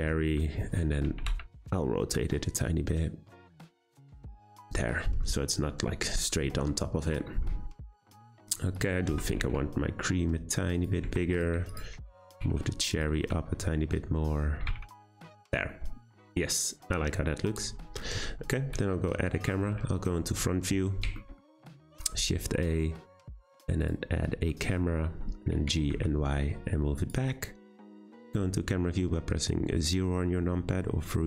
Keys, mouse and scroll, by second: 0.2 `, 0.6-1.0 scroll up 3, 1.0 r, 4.4 click, 4.7-5.4 scroll down 6, 5.4-6.6 middle drag, 6.6-7.3 scroll up 2, 7.3-7.7 shift+middle drag, 7.7-8.0 scroll up 2, 8.0-8.7 middle drag, 8.7 click, 9.1 Tab, 9.3 a, 9.4 s, 11.1 Tab, 11.3 click, 11.7 shift+click, 12.3 g, 13.1 `, 14.6 g, 15.2 click, 15.5 scroll down 2, 15.7-17.5 middle drag, 17.5-18.7 scroll down 1, 18.7 `, 20.2-20.5 shift+middle drag, 20.5-21.2 scroll up 4, 21.2-21.8 shift+middle drag, 21.8 shift+a, 24.2 scroll down 3, 24.5-25.5 middle drag, 25.5 g, 29.1-31.2 scroll down 2.